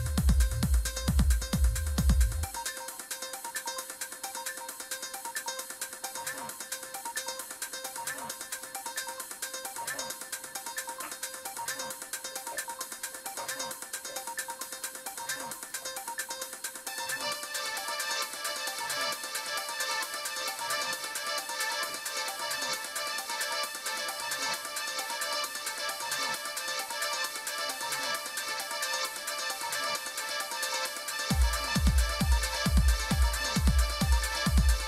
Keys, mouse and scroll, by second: 8.4 click, 15.5 click, 18.3 click, 20.2 click, 22.9 click, 29.1 click, 30.8 click, 34.2 click.